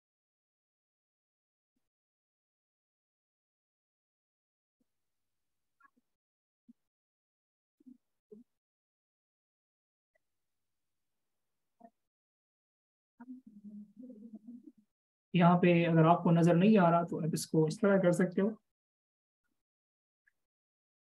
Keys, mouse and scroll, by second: 2.0-3.5 typing, 11.0-13.7 typing, 17.2 shift+super+click, 20.3 alt+shift+click.